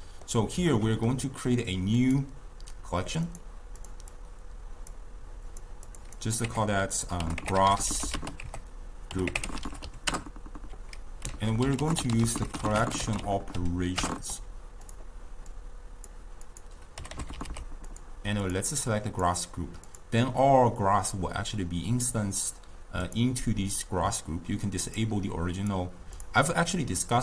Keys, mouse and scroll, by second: 2.0-3.3 drag, 3.8 drag, 4.2 click, 5.5 drag, 5.9-8.0 drag, 8.0 s, 11.3 ctrl+a, 12.1 l, 15.5 drag, 16.6 click, 17.5 s, 18.5 click, 18.8 click, 19.9 click, 23.1 click, 24.9 click, 25.6 click, 26.2 click.